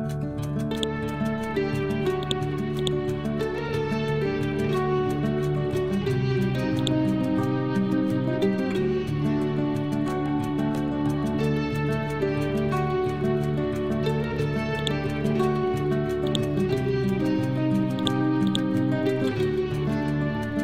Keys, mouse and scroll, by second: 0.8 click, 2.8 right click, 6.8-9.3 drag, 9.3 scroll up 1, 10.5-10.9 scroll down 1, 12.1 scroll up 1, 12.8 scroll down 1, 14.8 click.